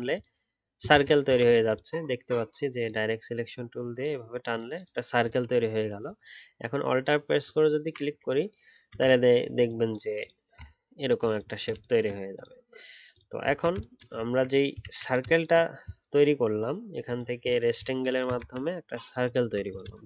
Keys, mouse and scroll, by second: 0.9 ctrl+z, 7.4 alt+click, 10.6-11.0 alt+scroll down 1, 11.0-12.4 alt+scroll up 1, 13.5-14.2 alt+scroll down 1, 14.2-14.8 alt+scroll up 1, 14.8 ctrl+z.